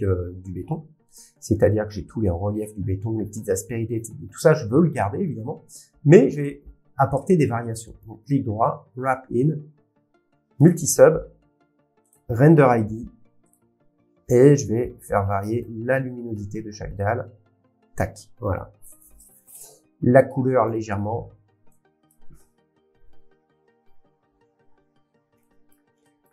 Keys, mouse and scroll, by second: 0.2 scroll up 7, 1.1 middle click, 1.1 scroll up 3, 1.9 middle click, 2.2 scroll down 9, 4.5 scroll, 6.8 middle click, 8.0-9.5 right drag, 10.6 click, 12.1 click, 13.5 click, 15.6 click, 20.6 click, 25.9-26.3 scroll.